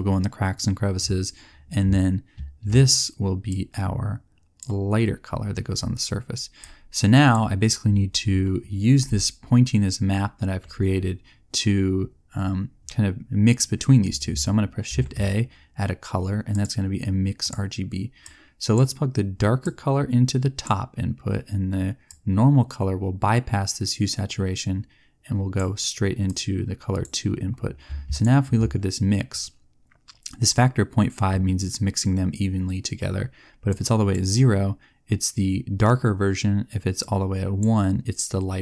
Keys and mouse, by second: 3.4-4.5 drag, 6.7 click, 14.8 shift+a, 26.4 click, 33.8-38.6 drag.